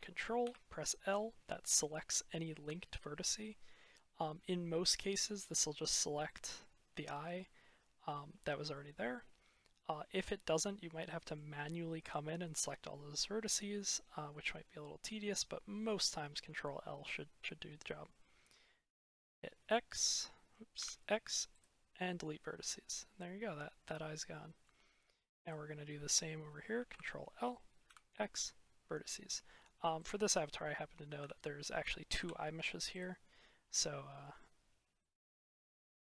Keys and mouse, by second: 0.3 ctrl+l, 4.5-5.0 middle drag, 7.1-8.7 middle drag, 9.5-11.2 middle drag, 13.5-15.2 middle drag, 19.2 z, 20.7 x, 22.0-23.8 drag, 23.8-24.2 middle drag, 24.2 click, 24.4 middle click, 26.8 ctrl+l, 27.7 x, 29.9 click, 31.1 ctrl+l, 32.9 x, 33.6-34.3 drag, 34.9 click.